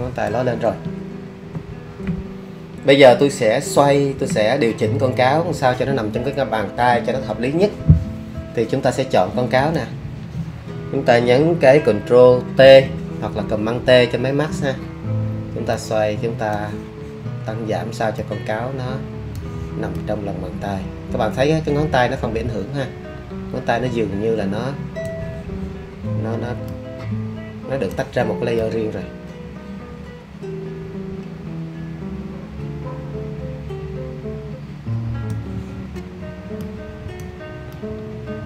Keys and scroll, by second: 12.6 super+t.